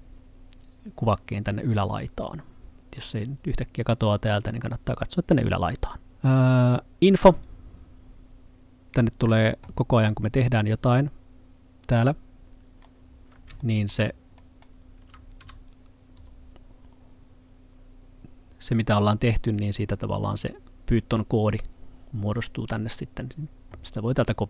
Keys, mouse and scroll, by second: 6.1 click, 10.1 middle click, 13.1-13.6 scroll up 1, 13.6 middle click, 15.4 s, 16.2 click.